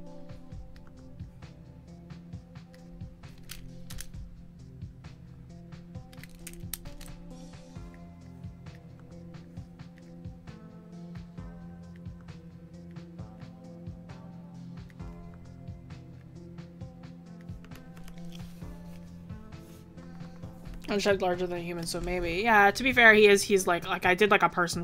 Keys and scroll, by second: 15.4 ctrl+z.